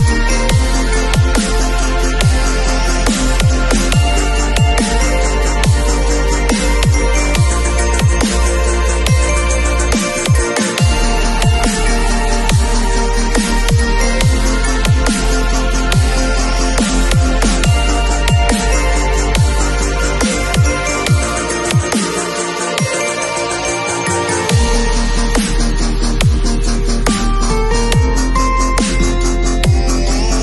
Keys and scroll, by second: 2.9 x, 3.5 shift+super+n, 3.6 shift+super+Return, 4.0 alt+Delete, 4.3 alt+super+d, 4.4 super+v, 5.2 v, 8.5 shift+super+e, 11.4 super+Tab, 19.1 alt+shift+Return, 19.7 alt+Return.